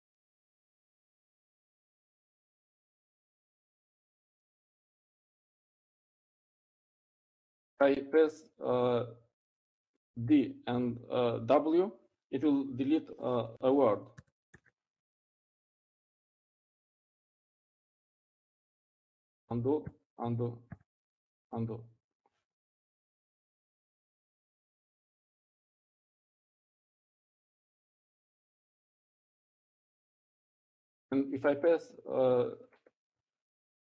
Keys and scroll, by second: 1.2 u, 18.3-20.4 typing, 21.9-23.9 typing.